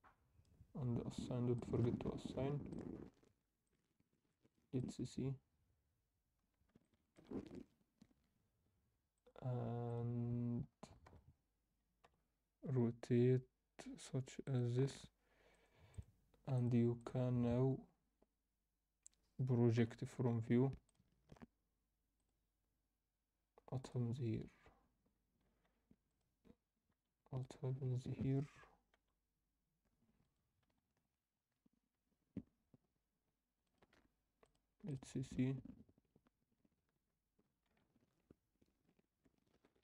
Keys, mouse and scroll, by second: 3.6 click, 5.8 click, 6.3-6.7 scroll up 2, 6.8 alt+shift+middle click, 7.4 scroll up 1, 9.1-10.2 drag, 11.0 a, 12.0 r, 15.5-18.2 drag, 18.9 scroll down 1, 19.7 u, 22.1-24.1 drag, 27.7-28.9 scroll down 1, 27.7 s, 28.9-29.6 scroll down 1, 28.9 g, 30.6 s, 34.4-36.3 drag, 37.6-38.9 scroll up 3, 37.8 Tab.